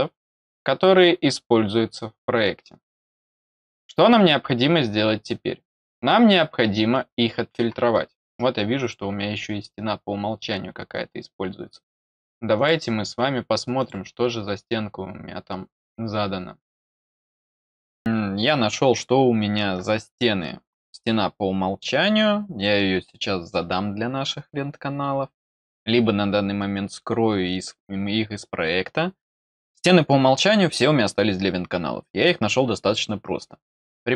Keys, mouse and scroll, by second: 8.7 click, 13.7 click, 17.8 click, 33.8-34.1 drag.